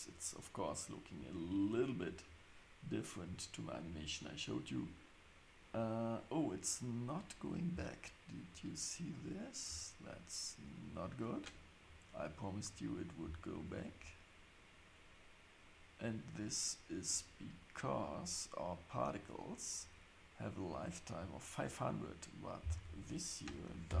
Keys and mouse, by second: 7.7 space, 8.4 click, 11.8 click, 22.7-24.0 drag.